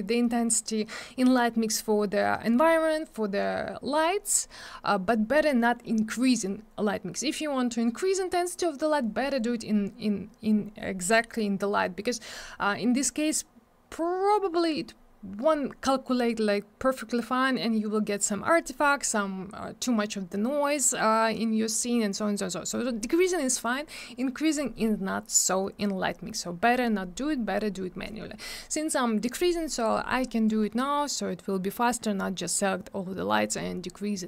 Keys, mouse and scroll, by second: 30.5 click.